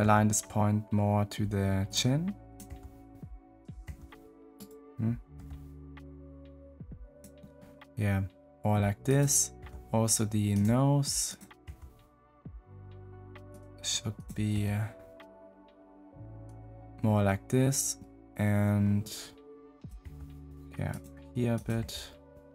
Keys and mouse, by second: 3.8 g, 5.3 g, 9.0 click, 9.5 g, 11.7 g, 19.7 click, 20.0 g, 21.5 click, 21.7 g.